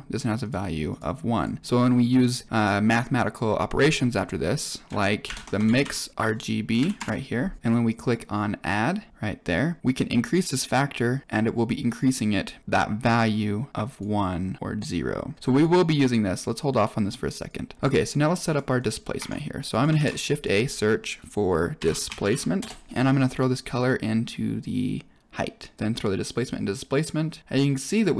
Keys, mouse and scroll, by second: 0.3 click, 0.8 click, 1.3 click, 3.7 click, 4.5 click, 5.2 shift+a, 5.4 d, 5.4 BackSpace, 7.6 click, 7.8-9.1 drag, 9.8-11.2 drag, 13.8 click, 15.3 click, 16.4-17.0 drag, 17.4 click, 18.1 click, 18.1 middle click, 18.7 click, 19.1 Tab, 19.6 click, 19.9 shift+a, 23.7-25.5 drag, 25.7-26.2 drag, 27.4-28.1 middle drag.